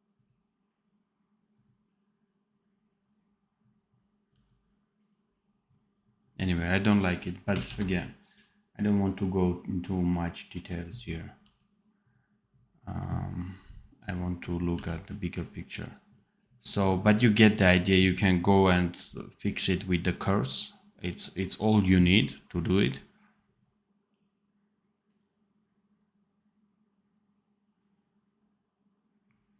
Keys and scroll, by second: 4.2 d, 7.6 ctrl+s, 11.2 d, 14.6 v.